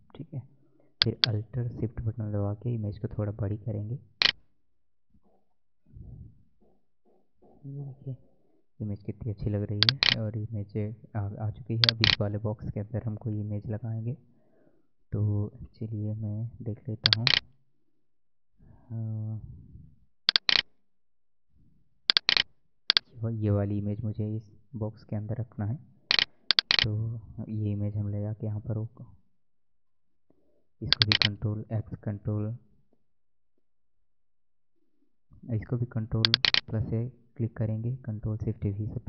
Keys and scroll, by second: 5.6 Right, 7.2 Up, 7.9 Right, 14.0 alt+Tab, 28.8 ctrl+a, 29.5 ctrl+x, 29.9 ctrl+w, 38.5 ctrl+shift+v.